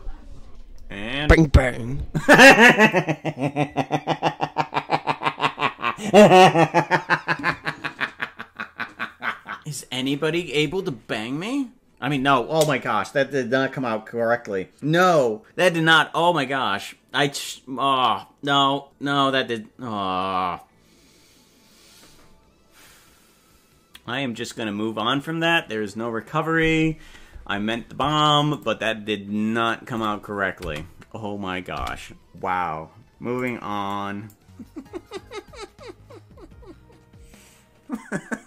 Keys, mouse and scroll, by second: 31.7 space.